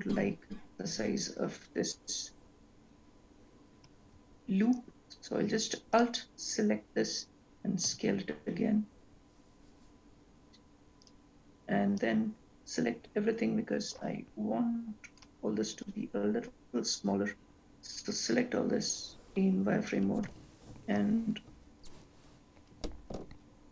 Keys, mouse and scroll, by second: 6.2 alt+click, 8.2 s, 12.3 click, 20.6 s.